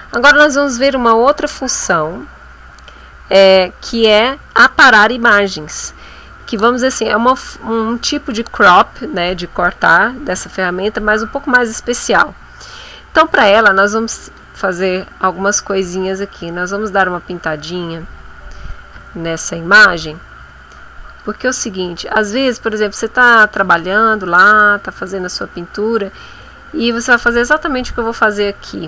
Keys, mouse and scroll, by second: 16.4 click, 18.2 click, 21.0 click, 21.9 click, 22.7 click, 23.6 click, 25.0 click, 25.9 click, 27.1 click, 27.6 click, 28.4 middle click.